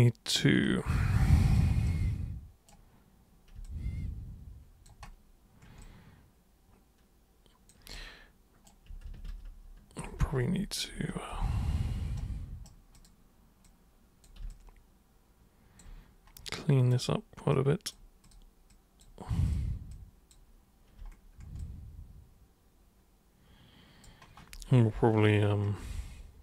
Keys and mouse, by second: 1.1 alt+super+click, 1.8 super+right click, 3.6-4.8 alt+super+drag, 5.8-7.7 alt+super+drag, 7.9 super+right click, 9.0 ctrl+super+z, 9.3 ctrl+super+z, 9.4 ctrl+super+z, 10.2 ctrl+super+z, 10.4 ctrl+super+z, 10.9 ctrl+super+z, 11.3 ctrl+super+z, 12.1 super+right click, 12.9 super+click, 13.6 super+click, 14.5-15.7 alt+super+drag, 16.9 super+click, 17.5 super+click, 18.2 super+click, 18.7 super+click, 19.4 super+click, 19.9 super+click, 21.6-24.0 alt+super+drag.